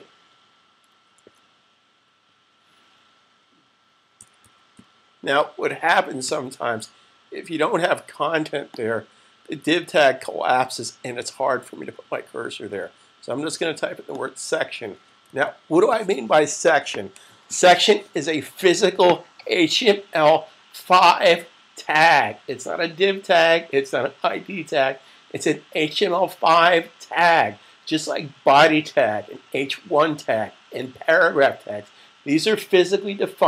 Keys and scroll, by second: 1.1 super+z, 4.1-6.7 typing, 15.3 super+s.